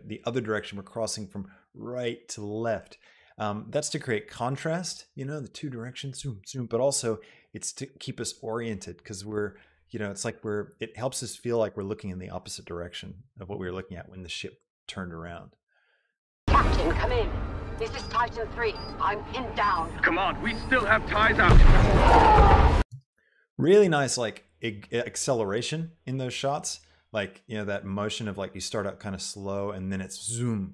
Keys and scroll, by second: 16.5 space, 23.1 space.